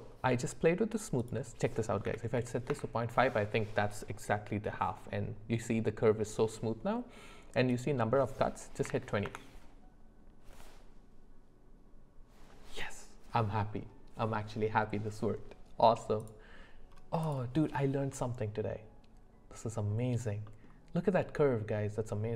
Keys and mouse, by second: 1.2-2.7 drag, 7.7-9.3 drag, 18.1 click, 18.1 right click, 18.6-20.2 middle drag, 20.5 middle click.